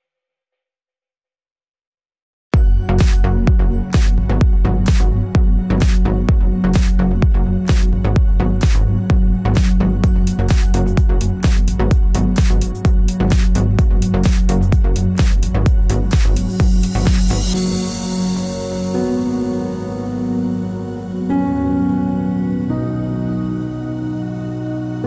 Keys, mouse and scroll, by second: 0.7 scroll up 1, 0.9 click, 0.9 Tab, 1.5 alt+click, 2.1 ctrl+click, 2.2-2.7 middle drag, 2.7 ctrl+click, 2.8 middle click, 3.2 ctrl+click, 3.4-5.0 middle drag, 5.0 shift+click, 5.3 ctrl+click, 6.6 shift+d, 6.7 Return, 7.0 p, 7.1 Tab, 7.4 click, 9.0-11.4 drag, 9.3 Tab, 9.7 a, 11.4 1, 12.5 click, 12.9 a, 13.7 shift+middle click, 13.8 scroll, 14.0 Tab, 14.2 click, 14.9 Tab, 15.2 2, 15.2 click, 15.5 ctrl+click, 18.1 shift+d, 18.2 Return, 18.8 Tab, 19.0 click, 19.8-22.1 drag, 20.0 Tab, 20.6 a, 22.8 click, 22.8 Tab, 23.0 click, 23.1 scroll down 1, 23.3-25.0 middle drag, 23.5-23.9 scroll up 1, 24.9 scroll down 1.